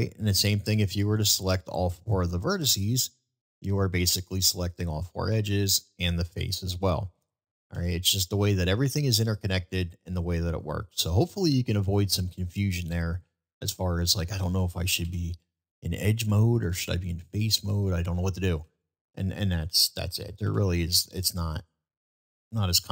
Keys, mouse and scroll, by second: 1.4 click, 2.3 click, 3.5 click, 4.2 click, 6.8-7.2 middle drag, 8.7-9.0 middle drag, 11.6 shift+middle drag, 12.3 shift+middle drag, 12.8-13.2 shift+middle drag, 15.2 typing, 15.3 click, 16.2 shift+click, 17.4 shift+click, 17.4 typing, 18.8 shift+click, 20.5 ctrl+b.